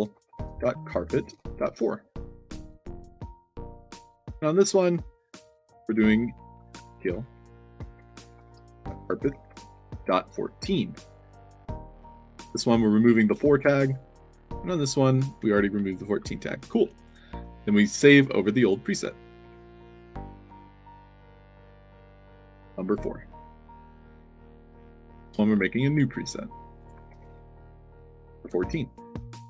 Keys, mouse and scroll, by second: 0.0-1.5 typing, 2.7 click, 3.4 shift+a, 3.8 click, 4.6 click, 5.2 middle click, 5.9 click, 6.9 i, 8.3-10.5 typing, 11.5 click, 13.1 click, 13.7 click, 15.3 d, 17.3 click, 18.1 click, 18.5 click, 19.4 ctrl+v, 20.1 click, 21.1 click, 21.7 ctrl+v, 22.3 space, 22.7 4, 23.8 click, 24.3 click, 25.1 click, 25.8 click, 26.7 click, 27.0 ctrl+v, 27.9-28.9 typing.